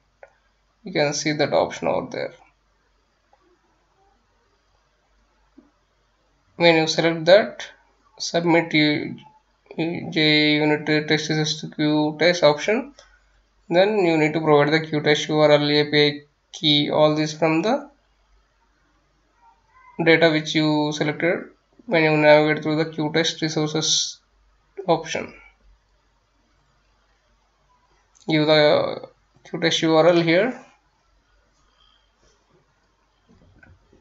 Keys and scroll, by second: 28.6 F9, 30.0-34.0 typing.